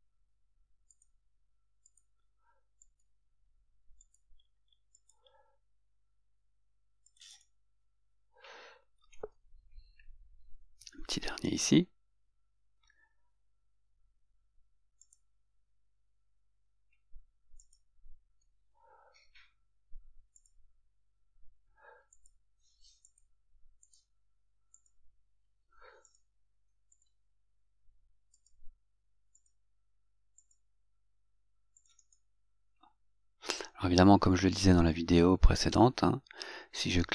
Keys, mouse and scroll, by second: 1.1 click, 2.1 click, 2.9 click, 4.2 click, 5.1 click, 7.3 click, 7.5 right click, 15.2 click, 17.7 click, 20.5 click, 22.3 click, 23.3 click, 24.0 click, 28.6 click, 29.5 click, 30.5 click, 32.1 right click.